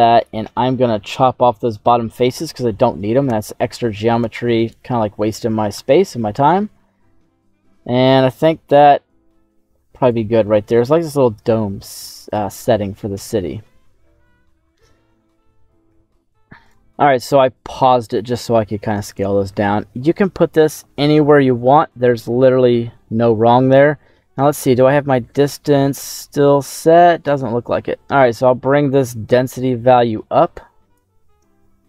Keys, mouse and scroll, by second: 1.4 middle click, 3.2 Tab, 4.1 z, 4.7-5.3 scroll down 1, 5.7 /, 8.7 s, 10.0 click, 11.3 ctrl+a, 13.2 middle click, 15.1 middle click, 16.6 scroll up 3, 17.1 right click, 17.7 scroll down 2, 18.2 middle click, 18.9-19.4 scroll up 2, 19.4 middle click, 24.0-25.9 middle drag, 26.1-27.0 scroll up 5, 27.0 middle click, 28.4-30.9 drag.